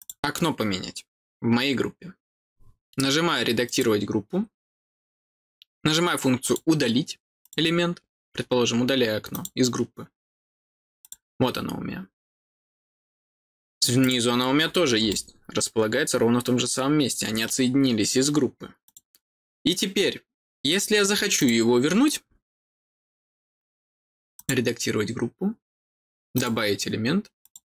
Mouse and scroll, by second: 3.6 click, 6.4 click, 7.4 click, 9.3 click, 11.0-14.0 drag, 15.0-17.2 middle drag, 18.8 click, 21.3 click, 24.3 click, 26.3 click, 27.4 click.